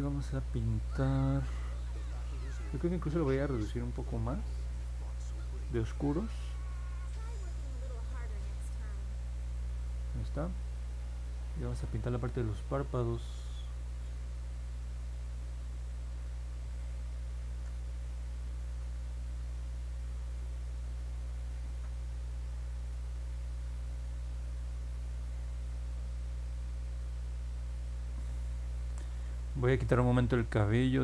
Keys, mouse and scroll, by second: 13.5 click, 14.7 click, 15.7 click, 17.4 ctrl+z, 18.3 click, 19.2 click, 20.0 click, 20.8 click, 23.0 click, 23.7 ctrl+z, 24.3 click, 25.0 click.